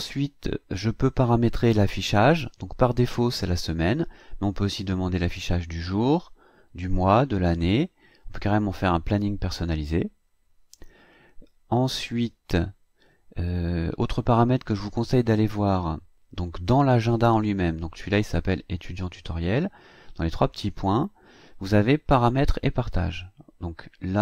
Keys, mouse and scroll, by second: 3.3 click, 12.2 click, 20.5 click.